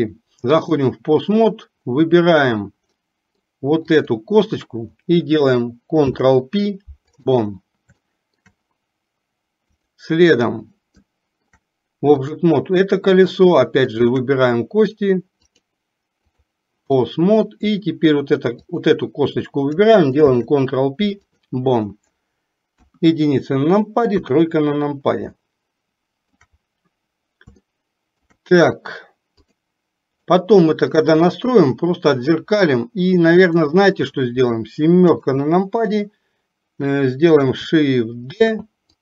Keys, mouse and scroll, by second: 3.0 middle click, 4.0 click, 8.1 shift+middle click, 9.8 click, 11.1 shift+middle click, 12.3 click, 14.0 shift+click, 15.6-16.6 drag, 17.0-17.5 middle drag, 18.8 click, 22.9 KP_1, 24.3 KP_3, 25.4-26.4 shift+middle drag, 27.8 shift+middle click, 29.5 click, 30.4-31.0 middle drag, 33.5 click, 35.1 KP_7, 38.5 shift+d.